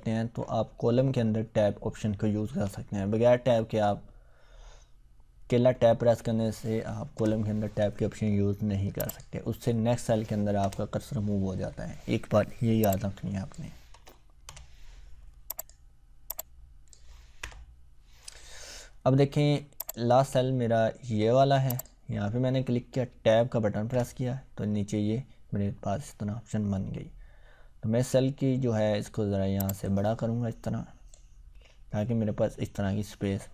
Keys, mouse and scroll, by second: 2.5 ctrl+Tab, 7.1 BackSpace, 9.0 click, 10.5 BackSpace, 12.8-13.8 click, 13.9 BackSpace, 14.4 Return, 15.6 click, 17.4 BackSpace, 19.8 click, 23.9 Tab, 29.5-31.4 drag, 31.5-33.5 scroll down 1.